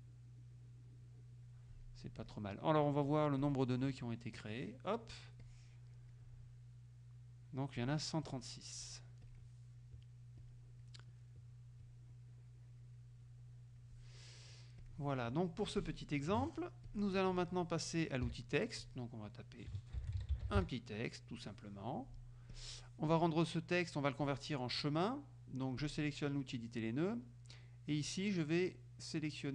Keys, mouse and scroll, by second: 3.4 click, 4.4 click, 5.4 click, 9.4 click, 10.5 click, 11.9-13.2 drag, 13.3 click, 14.9 click, 16.1 click, 16.9 click, 18.4 t, 18.9 click, 19.8-21.1 typing, 22.6 click, 25.9 click.